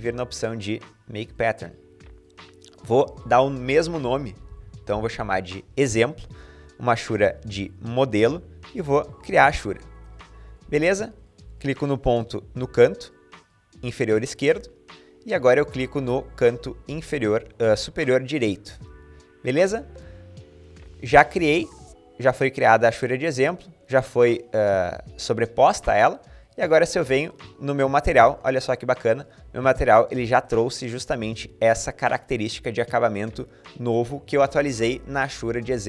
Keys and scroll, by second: 3.5-5.2 typing.